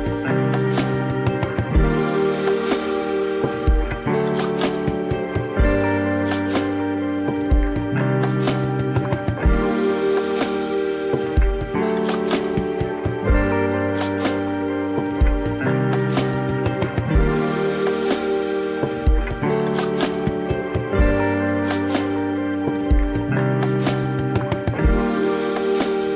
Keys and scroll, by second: 18.4 ctrl+=.